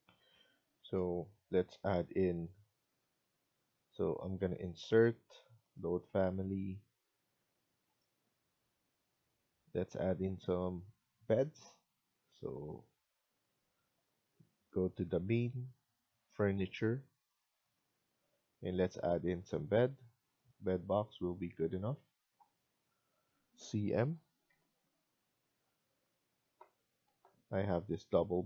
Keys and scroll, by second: 26.7-27.5 typing.